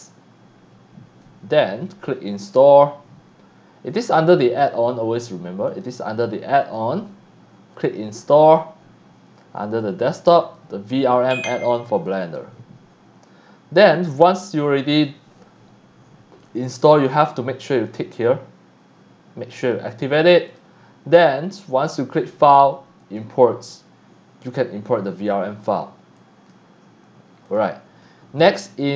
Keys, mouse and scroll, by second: 1.2-1.6 drag, 2.4 click, 3.9 click, 5.7 click, 6.6 click, 7.7 click, 9.6 click, 10.4 click, 12.1 click, 12.2 click, 17.7 click, 20.5 click, 21.9 click, 23.0 click, 26.2-26.5 drag, 27.4 click, 28.8 click.